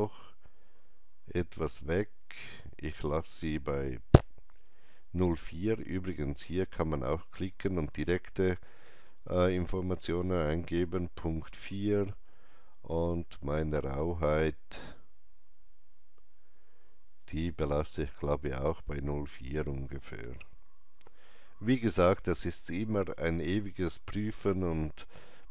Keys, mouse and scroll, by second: 8.4 KP_Decimal, 8.9 KP_4, 10.4 KP_Enter, 13.6 KP_Enter, 13.6-20.5 drag, 13.6 KP_4, 20.5 KP_4, 20.9 KP_Enter.